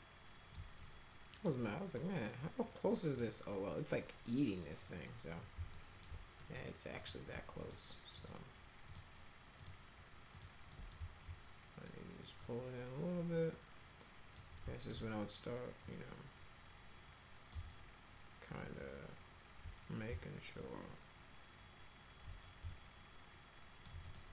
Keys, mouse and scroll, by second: 1.5-1.9 middle drag, 2.3 middle click, 4.9 middle click, 5.7 alt+middle click, 6.4 middle click, 7.0 click, 7.6 ctrl+click, 8.2 ctrl+click, 8.9 ctrl+click, 9.6 ctrl+click, 10.4 ctrl+click, 10.7 middle click, 12.4-14.4 drag, 14.6 alt+middle click, 15.8-17.5 drag, 17.7-19.8 alt+middle drag, 20.1-22.4 alt+middle drag, 22.7-23.8 alt+middle drag, 24.0 click.